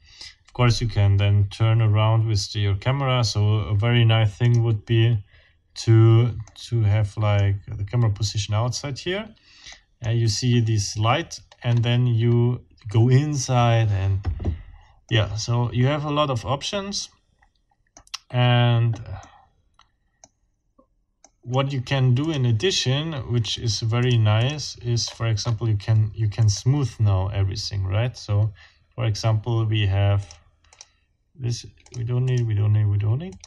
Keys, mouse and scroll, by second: 4.4 middle click, 5.3-6.3 scroll down 6, 6.4 middle click, 7.3 click, 9.7 middle click, 11.6-12.1 scroll up 2, 12.3 scroll up 2, 14.0-14.4 scroll down 2, 15.1-18.1 middle drag, 19.2-20.4 middle drag, 21.2 middle click, 22.2 middle click, 23.4 middle click, 24.0 middle click, 24.4 middle click, 25.0-25.6 scroll up 2, 25.8 scroll down 2, 26.4 right click, 30.2 click, 30.7 click, 31.8 click, 32.3 click, 33.3 click.